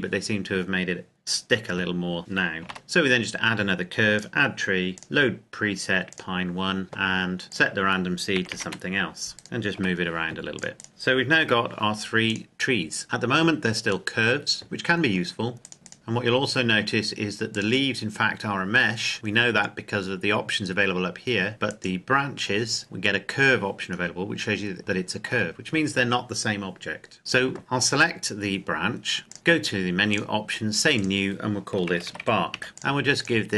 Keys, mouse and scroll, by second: 2.5 click, 2.6 shift+a, 4.1 click, 7.5 click, 8.3 KP_1, 8.5 KP_0, 8.6 KP_Enter, 9.6 right click, 9.7 g, 10.5 click, 10.7 right click, 11.3 g, 12.2 click, 15.7 right click, 16.2 scroll up 1, 17.5 right click, 21.6 right click, 23.9-24.8 scroll down 2, 24.8 shift+middle click, 27.2-28.5 scroll down 2, 29.2-31.4 drag, 31.9-32.5 typing, 32.7 Return.